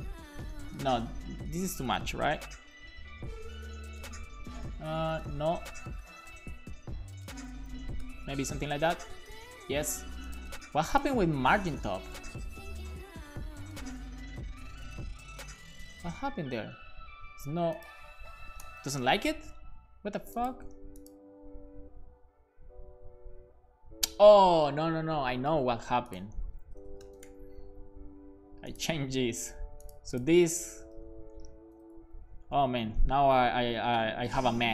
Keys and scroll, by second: 0.0-1.5 typing, 0.8 Left, 1.1 Left, 2.7 super+s, 5.4 Left, 5.4 Right, 5.7 BackSpace, 6.3 super+s, 7.3 Left, 7.4 Left, 7.7 Left, 8.0 BackSpace, 8.5 super+s, 18.4 BackSpace, 18.6 1, 26.6 shift+super+Left, 27.0 BackSpace, 27.2 super+s, 30.5-31.7 typing, 33.1 BackSpace, 33.8 BackSpace, 34.0 l, 34.5 a.